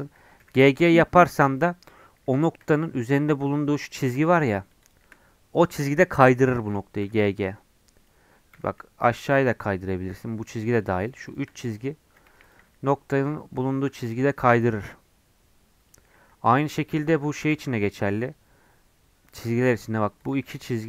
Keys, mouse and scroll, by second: 0.3 g, 1.7 scroll up 4, 3.4 2, 4.5-6.5 shift+drag, 6.5 1, 6.6 click, 7.0 g, 8.5 g, 10.3 2, 10.5-12.2 drag, 12.2 1, 12.4 click, 12.8 g, 13.8 g, 16.1 scroll down 1, 16.3 2, 16.6 click, 16.8 shift+middle click, 17.5 g, 20.2-20.8 drag.